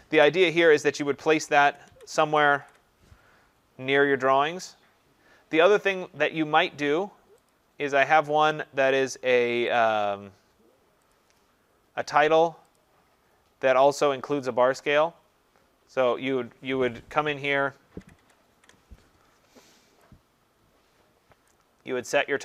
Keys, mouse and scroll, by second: 0.1 Delete, 1.4 ctrl+=, 1.7 ctrl+=, 1.9 ctrl+-, 2.2 ctrl+-, 2.3 ctrl+-, 2.5 ctrl+-, 2.6 ctrl+-, 5.9 click, 7.5 click, 9.8 click, 11.1 click, 12.8 click, 18.0 ctrl+=, 18.2 ctrl+=, 18.5 ctrl+=, 21.5 click.